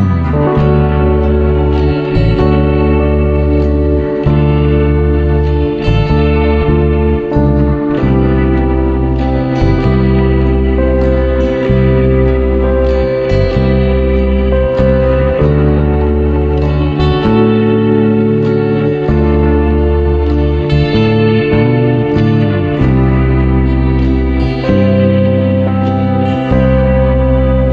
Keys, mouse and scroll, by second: 0.9 click, 1.6 click, 2.3 Tab, 3.9 click, 5.0 ctrl+r, 8.9 click, 9.7 ctrl+z, 12.1 alt+click, 13.4 alt+shift+click, 14.5 shift+click, 18.3 alt+shift+click, 19.5 click, 21.2 alt+shift+click, 22.2 shift+click, 23.3 click, 25.1 ctrl+b.